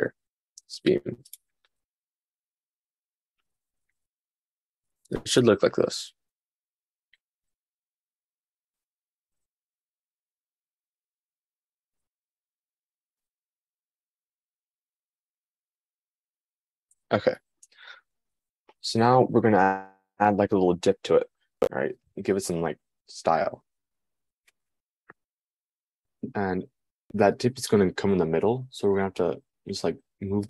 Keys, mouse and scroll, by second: 0.3 s.